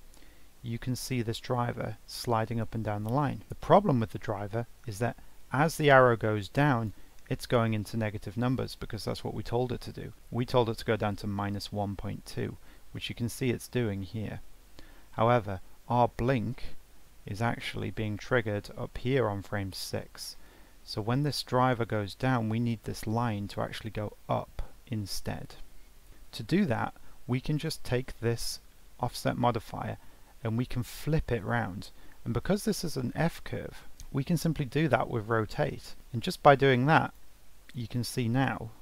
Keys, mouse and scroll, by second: 21.3-24.4 drag, 36.7-38.8 drag.